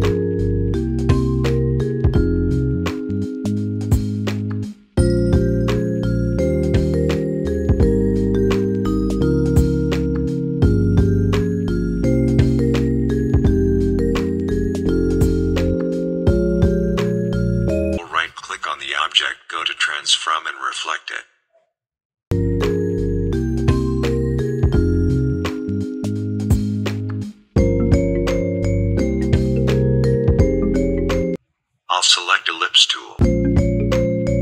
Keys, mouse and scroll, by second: 1.5 ctrl+c, 1.8 ctrl+f, 3.0 click, 4.7-6.3 alt+shift+drag, 8.3 Down, 9.3 click, 12.7 Up, 14.1 click, 18.0 click, 18.7 click, 19.2 right click, 20.6 click, 22.6 right click, 24.0-28.4 drag, 30.4 right click, 30.8 click, 32.2-34.4 alt+shift+drag.